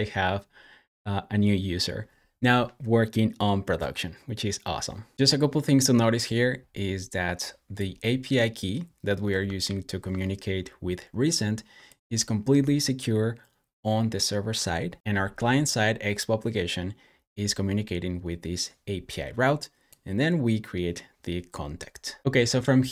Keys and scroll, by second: 9.5 super+j.